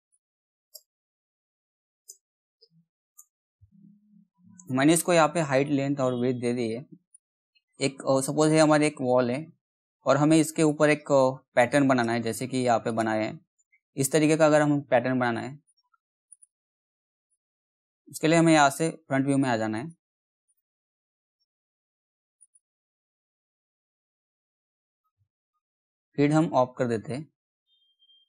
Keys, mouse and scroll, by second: 0.7 BackSpace, 5.6 click, 8.0-9.1 scroll up 1, 9.1-12.8 drag, 15.6 click, 19.2 f, 19.7 click, 20.4 right click, 21.3 click, 21.3 click, 22.7 f, 24.0 alt+w, 25.0 middle click, 26.3 g.